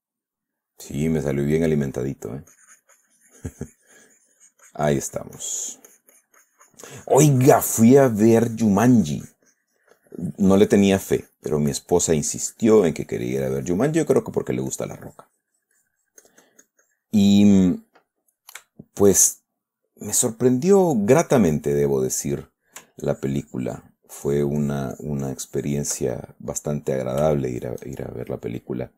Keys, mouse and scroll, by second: 0.4-2.2 middle drag, 2.4 middle click, 11.0-14.4 drag, 14.5 click, 17.8 click, 18.4 click, 19.1 shift+click, 20.0-21.5 drag, 21.6-23.2 drag, 23.4-24.4 ctrl+drag, 24.6-26.4 ctrl+drag, 26.4 ctrl+middle click, 27.2 middle click, 27.8-28.9 shift+middle drag.